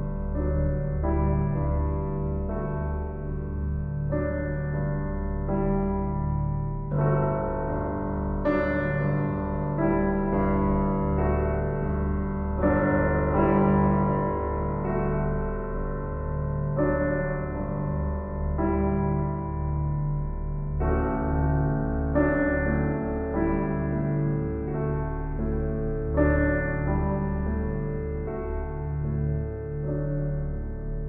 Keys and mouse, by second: 0.0 click, 0.6 Tab, 2.0 alt+a, 2.4 b, 2.6 click, 6.0 Tab, 7.4 click, 7.7 click, 9.4 click, 10.3 click, 14.6 F3, 16.0-16.9 typing, 18.3 Return, 19.8 Tab, 21.9 typing, 24.5 click, 24.6 click, 24.6 typing, 26.2 click, 27.4-28.6 typing, 29.4-30.5 drag, 30.9-31.0 typing.